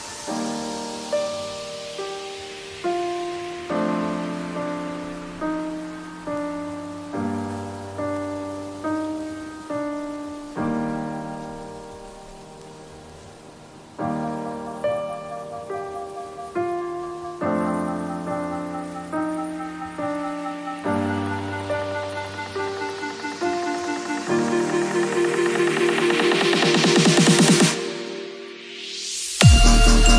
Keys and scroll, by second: 3.4 ctrl+t, 6.7 ctrl+t, 10.0 ctrl+t, 14.2 ctrl+t, 19.5 l, 23.7 ctrl+c, 24.0 ctrl+w, 24.3 v, 27.6 ctrl+v, 27.9 ctrl+t.